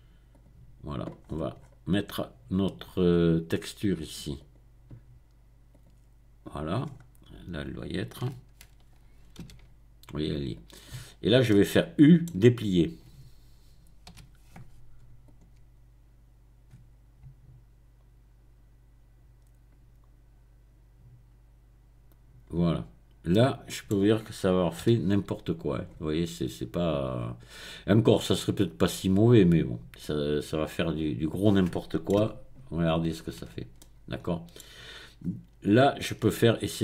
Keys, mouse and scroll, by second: 0.3 click, 1.2-2.4 scroll down 1, 4.4 click, 5.7 click, 6.8-7.6 scroll up 1, 7.6-8.3 scroll down 1, 9.4 s, 10.5 right click, 11.5-12.6 middle drag, 12.6-13.3 scroll down 1, 14.0 u, 15.2 click, 23.3 middle click, 24.8 middle click, 24.8 g, 25.7 click, 28.2-29.0 scroll up 2, 29.4-30.0 scroll down 2, 30.0-32.1 middle drag, 32.2 Tab, 32.2 middle click, 33.4 Tab, 35.2-35.8 scroll up 2, 35.8-36.6 scroll down 2.